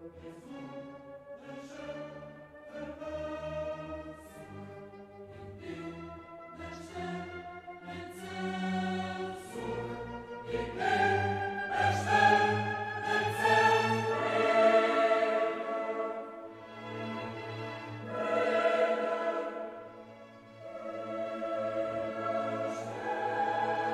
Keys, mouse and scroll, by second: 1.0 click, 2.2 click, 4.2 click, 5.3 click, 7.5 click, 8.8 click, 10.4 click, 11.5 click, 14.1-14.6 scroll up 1, 15.3 click, 16.2 click, 17.6-18.1 scroll down 2, 18.4-19.2 scroll down 4, 20.9 click, 21.8 click, 23.6 click.